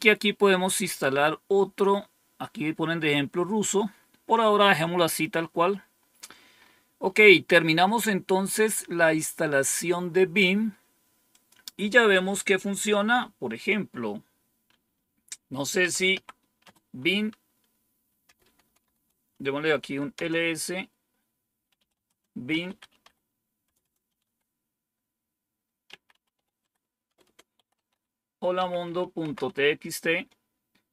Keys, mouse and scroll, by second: 3.9-4.6 scroll down 2, 4.9-6.5 scroll down 3, 6.5 scroll down 1, 11.2 click, 12.1 click, 15.5-16.5 typing, 18.1-24.6 typing, 25.8 typing, 27.7 typing, 28.8-29.4 typing.